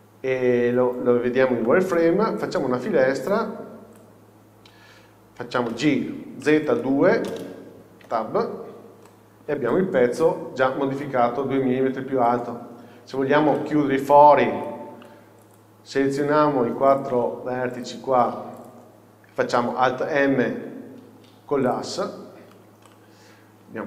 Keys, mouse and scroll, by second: 4.1 click, 8.1 Tab, 8.7 scroll down 1, 9.1 middle click, 10.3 z, 10.3 KP_6, 12.3-12.8 scroll up 1, 13.1 scroll up 1, 13.7 shift+middle click, 21.8 m, 22.6-22.9 scroll down 1, 22.9 middle click.